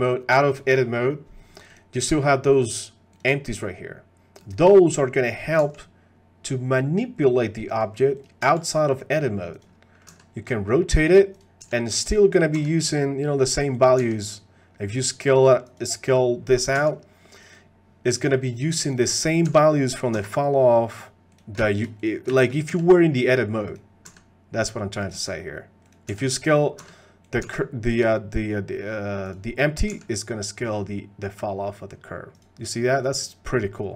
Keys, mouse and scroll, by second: 0.0 click, 2.5 click, 5.6 g, 8.4 g, 10.1 r, 12.5 r, 12.5 g, 14.0 s, 16.7 s, 18.8 click, 19.5 g, 20.1 r, 21.7 shift+middle click, 22.4 shift+click, 22.7 g, 24.0 r, 25.1 click, 26.1 g, 26.8 r, 27.0 middle click, 27.4 s, 30.6 s.